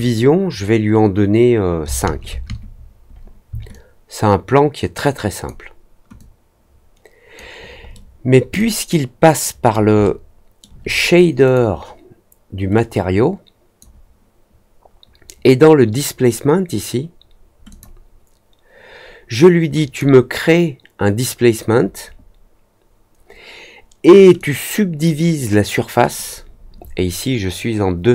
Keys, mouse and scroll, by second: 3.6-5.4 alt+drag, 6.1-7.3 alt+drag, 7.9-8.2 alt+middle drag, 8.5-9.7 alt+drag, 10.0 alt+middle click, 11.4 click, 12.7-13.7 drag, 17.6 click, 19.7 click, 24.3 click, 26.1-28.1 drag.